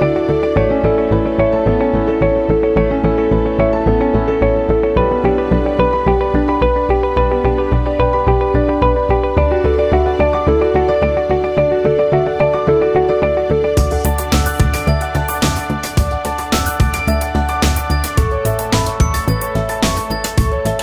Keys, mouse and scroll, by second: 0.0 alt+click, 0.0 shift+c, 0.2 f, 0.5-1.9 drag, 1.9 alt+middle click, 2.0 alt+click, 2.9 alt+right click, 3.0 alt+click, 3.2 alt+right click, 3.3 alt+middle click, 3.5-4.9 alt+drag, 4.9 alt+right click, 5.0 alt+click, 5.1 alt+middle click, 5.2 alt+click, 5.5 alt+right click, 5.7 alt+middle click, 5.8 alt+click, 6.0 alt+right click, 6.3 shift+c, 6.4 alt+right click, 6.5 alt+click, 6.6 f, 6.9-7.9 ctrl+drag, 7.9 alt+middle click, 8.0 alt+right click, 8.2 shift+click, 9.1 alt+right click, 9.2 alt+middle click, 9.5-12.3 shift+drag, 12.3 alt+middle click, 12.6-15.0 typing, 12.8 click, 13.3 click, 13.9 click, 14.9 alt+click, 15.2 click, 15.5 alt+right click, 15.7 alt+click, 16.0 alt+middle click, 16.1 alt+click, 17.0 alt+middle click, 17.1 alt+click, 17.3 alt+right click, 17.4 alt+middle click, 17.6 alt+click, 17.8 alt+middle click, 18.0 alt+right click, 18.0 alt+middle click, 18.2 alt+click, 18.4 shift+c, 18.5 f, 18.8 ctrl+click, 19.2 ctrl+z, 19.3 alt+right click, 19.6 ctrl+click, 20.3 ctrl+z, 20.7-20.8 drag.